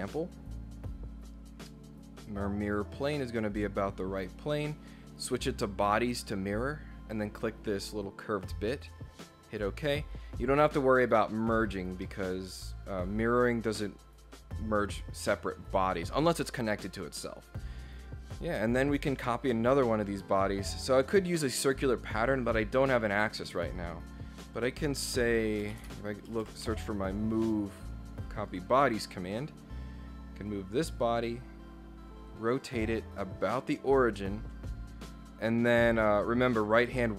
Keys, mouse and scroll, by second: 3.1 click, 5.6 click, 6.3 click, 7.1 click, 9.3 click, 9.5 click, 11.7 scroll up 2, 12.0 scroll down 2, 12.1-13.9 middle drag, 17.9 scroll down 2, 24.4 click, 25.4-26.7 typing, 28.4 click, 30.4 click, 32.3 click, 32.5 click, 33.3 click.